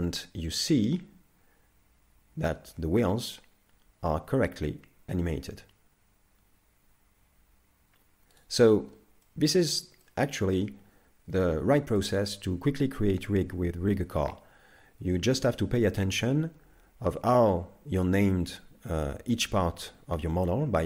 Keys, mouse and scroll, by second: 8.8-9.2 scroll down 4, 9.2 middle click, 10.0 shift+middle click, 11.4 middle click.